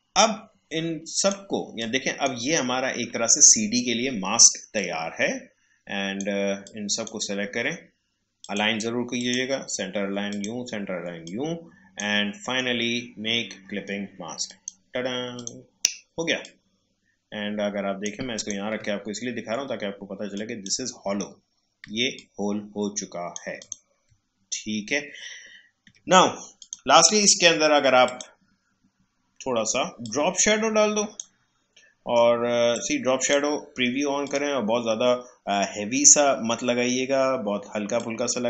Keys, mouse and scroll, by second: 4.7-12.4 drag, 12.4 right click, 14.5-18.3 drag, 19.1 alt+scroll up 1, 20.3 click, 21.2 alt+scroll down 1, 22.1-23.6 drag, 24.3 alt+scroll up 1, 25.2-25.6 alt+scroll down 1, 26.5-34.2 drag, 37.9-38.4 drag.